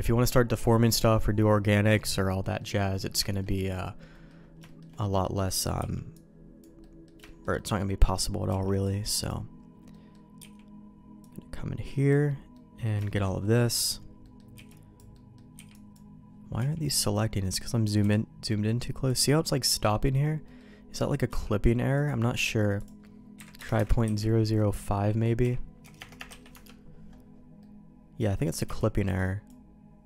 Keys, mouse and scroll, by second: 2.3 middle click, 2.8 middle click, 3.2 shift+middle click, 3.5 middle click, 4.1 middle click, 4.6 shift+middle click, 5.0 middle click, 5.7 b, 6.7 middle click, 7.2 shift+middle click, 7.5 middle click, 8.4 b, 9.8 middle click, 10.3 b, 12.5 middle click, 13.0 shift+middle click, 13.6 middle click, 14.2 middle click, 14.5 b, 15.1 middle click, 15.5 b, 16.5 b, 17.4 middle click, 19.8 middle click, 19.8 b, 20.4 middle click, 21.2 n, 21.9 click, 22.7-26.9 drag, 23.7 KP_0, 25.9 BackSpace, 26.1 BackSpace, 27.5 middle click, 28.6 b.